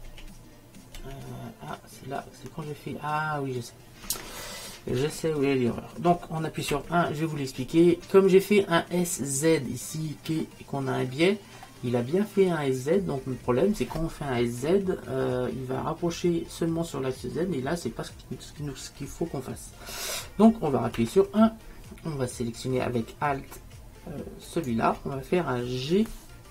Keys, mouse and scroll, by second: 8.6-12.3 middle drag, 24.6-26.5 right drag.